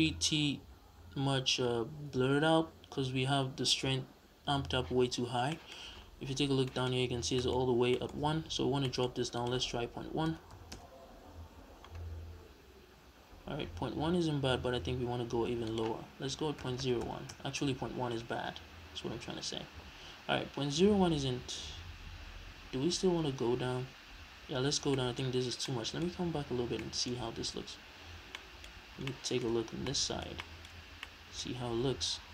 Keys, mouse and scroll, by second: 5.2 scroll down 2, 5.5 middle click, 5.8-6.3 scroll up 2, 6.3 scroll up 1, 6.5 scroll down 2, 6.7-7.0 middle drag, 7.0-7.9 scroll up 4, 7.4 middle click, 7.9-9.4 middle drag, 8.1-8.8 scroll up 2, 9.4-24.9 drag, 10.8 Return, 17.6 Return, 24.9-27.6 middle drag, 25.4 scroll down 2, 28.3-32.3 middle drag, 28.7-29.1 scroll up 2, 29.6 scroll down 2, 30.7-31.6 scroll up 2.